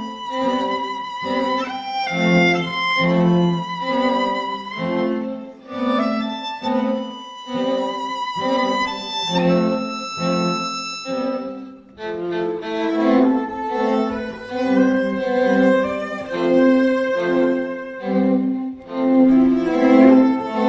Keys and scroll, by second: 15.9 [.